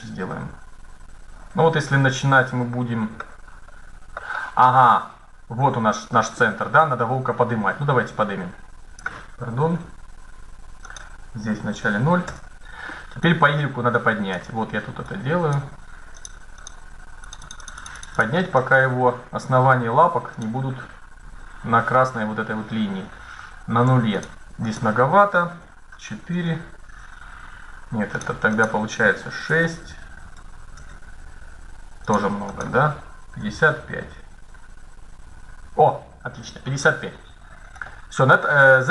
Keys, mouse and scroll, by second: 3.2-5.8 middle drag, 7.8-9.6 drag, 10.6-12.3 drag, 13.0-16.5 drag, 17.0-21.9 drag, 18.7 middle click, 23.9-25.7 drag, 27.9-29.8 drag, 31.8-33.6 drag, 34.1 KP_5, 35.9 middle click, 35.9-36.6 scroll up 1, 38.1-38.9 middle drag.